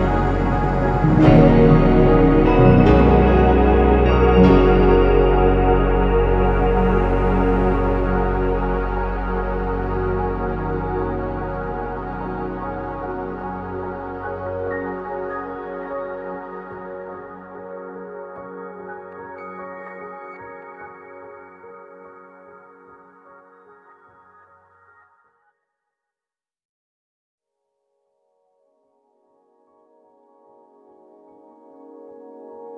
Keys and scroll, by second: 4.1-4.5 BackSpace, 4.6 BackSpace, 4.9-5.3 BackSpace, 5.5 BackSpace, 7.3 ctrl+c, 7.3-8.3 typing, 8.4 Return, 9.7-10.6 typing, 12.9 BackSpace, 23.3 Escape, 25.9-26.8 typing, 28.6-29.5 typing.